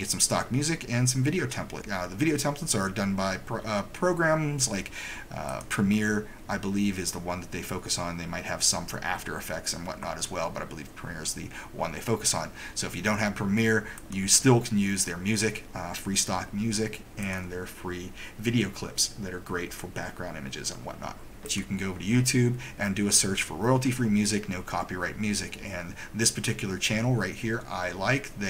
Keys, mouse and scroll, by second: 5.6 click, 14.1 click, 17.3 click, 21.4 click, 21.6 click.